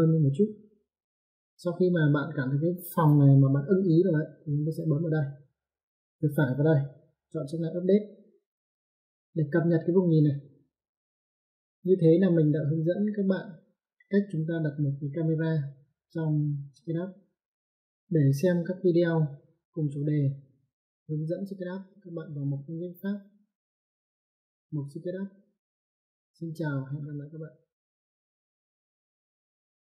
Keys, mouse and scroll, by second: 6.1 right click, 9.0 click.